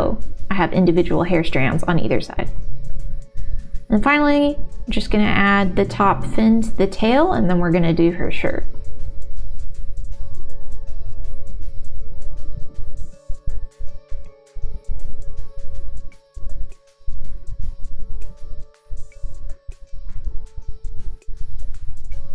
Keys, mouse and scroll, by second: 1.0 click, 1.5 ctrl+r, 4.4 3, 4.9 alt+click, 5.3 middle click, 6.4 e, 6.6 alt+s, 8.8 middle click, 10.7-12.2 middle drag, 12.6 g, 14.8 1, 15.6 g, 16.5 click, 17.1 middle click, 18.6 middle click, 18.9 g, 19.7 click, 19.9 middle click, 20.7 middle click.